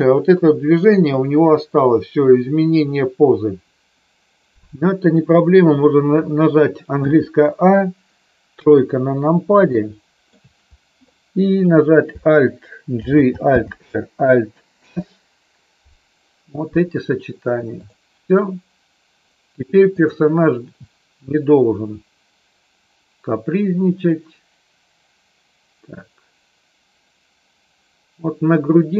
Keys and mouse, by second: 6.9 a, 8.5 KP_3, 9.6 shift+middle click, 12.9 alt+g, 13.6 alt+r, 19.9 click, 21.2-28.9 drag.